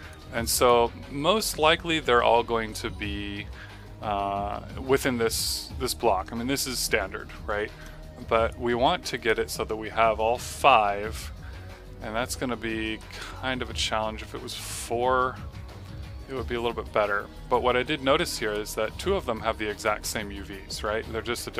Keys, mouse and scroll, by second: 0.3 right click, 8.6 click, 11.4 typing.